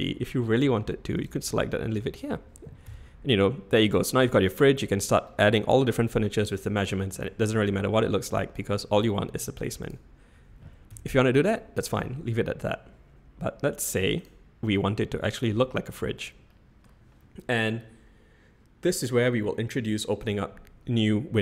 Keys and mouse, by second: 1.7-2.3 middle drag, 2.8 /, 10.9 /, 14.2 click, 14.7-15.5 middle drag, 16.6 middle click.